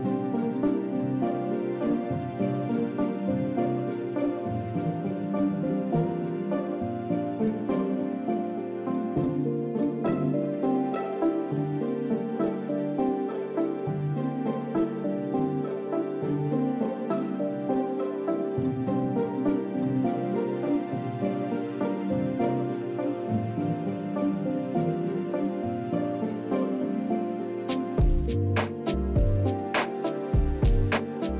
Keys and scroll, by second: 0.1 shift+s, 0.9 shift+s.